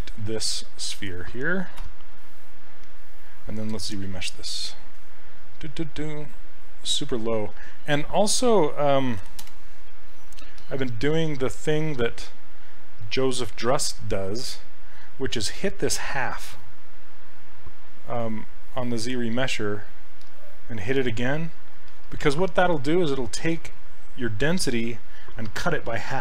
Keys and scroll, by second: 13.7 s.